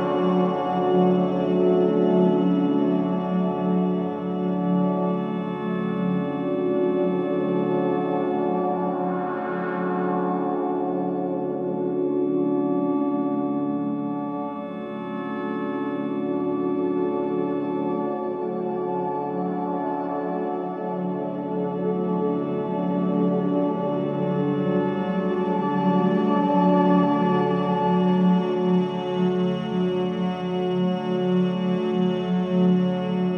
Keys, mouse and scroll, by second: 8.7-10.5 drag, 10.5-10.9 scroll up 1, 11.1-14.8 drag, 16.1 click, 17.1 scroll down 1, 17.6 middle click, 18.4 scroll down 1, 19.1 middle click, 19.7 click, 20.5-20.9 scroll down 1, 20.9 middle click, 28.0 F7, 28.6-29.0 scroll up 1, 29.5 middle click, 30.1-30.6 scroll down 1, 30.6 middle click.